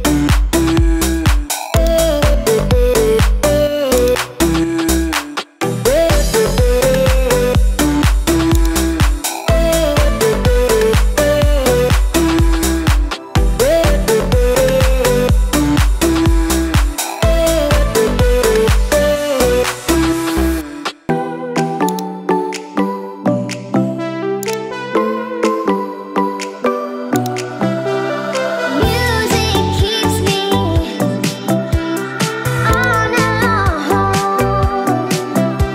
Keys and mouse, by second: 0.0 click, 1.9 click, 4.0-35.7 drag.